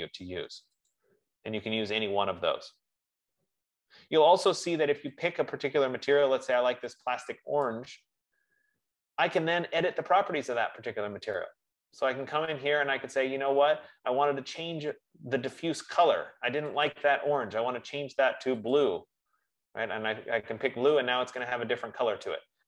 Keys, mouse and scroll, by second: 1.4 click, 2.3-3.3 scroll, 4.2-4.8 scroll, 5.7 click, 7.9 click, 12.1-14.1 scroll, 15.8 F15, 17.3 click, 19.1 click.